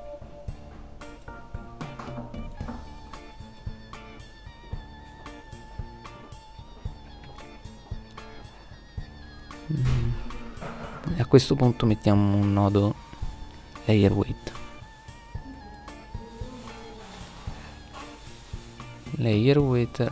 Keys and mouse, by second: 4.1-4.4 right drag, 4.7-5.9 middle drag, 12.7-14.3 middle drag, 14.8-17.0 middle drag, 17.5 middle click, 18.6-19.6 middle drag.